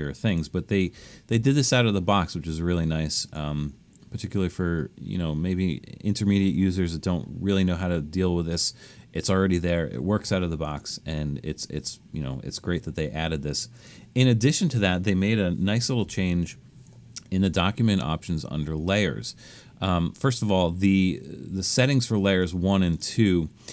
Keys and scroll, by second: 16.0 alt+super+a.